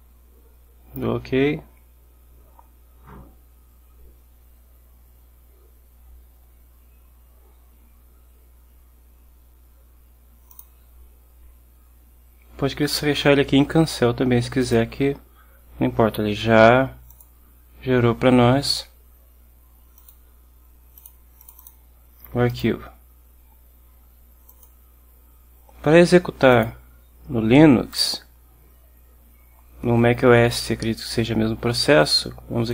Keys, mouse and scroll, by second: 10.6 click, 14.7 click, 17.2 click, 20.1 click, 21.1 click, 21.5 click, 22.6 click, 24.6 click, 26.6 click, 28.0 right click.